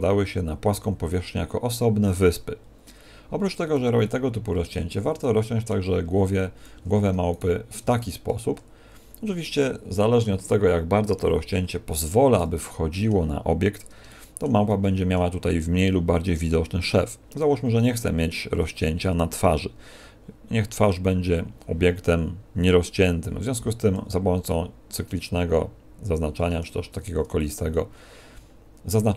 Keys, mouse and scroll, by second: 2.8 middle click, 3.5 a, 3.9 middle click, 6.1 a, 6.7 a, 7.3 alt+shift+right click, 7.9 middle click, 12.3 middle click, 14.0 shift+middle click, 14.7 middle click, 17.3 middle click, 23.5 c, 27.7 middle click.